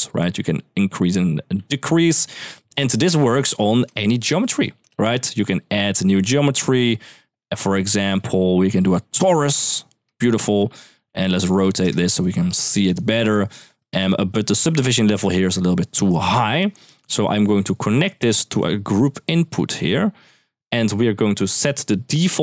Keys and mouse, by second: 1.5 ctrl+z, 3.7 shift+middle drag, 4.2 click, 4.7 shift+a, 9.2 g, 9.8 shift+middle drag, 10.4-11.5 typing, 10.5 click, 11.6 Return, 12.6 right click, 13.0 0, 13.3 shift+middle click, 14.2 click, 18.4-19.5 drag.